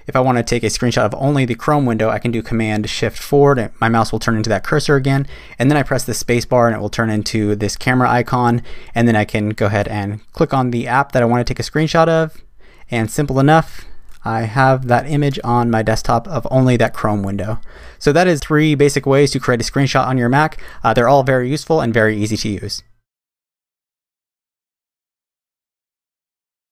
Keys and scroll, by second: 3.3 shift+super+4.